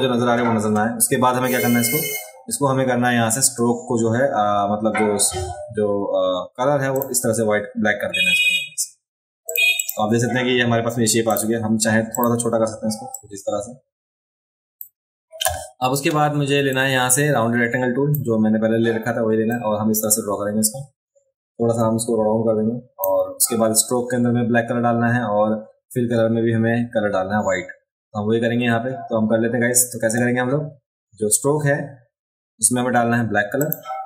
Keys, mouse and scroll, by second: 6.9 click, 9.4 click, 9.8 click, 11.3 click, 12.1 click, 13.1-14.8 drag, 16.7-18.1 drag, 19.5-23.0 drag, 33.6 click.